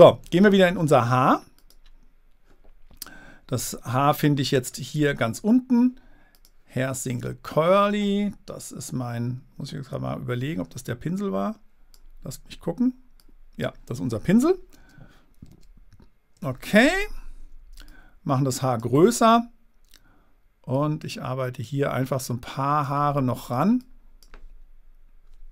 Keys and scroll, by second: 15.2 super+z.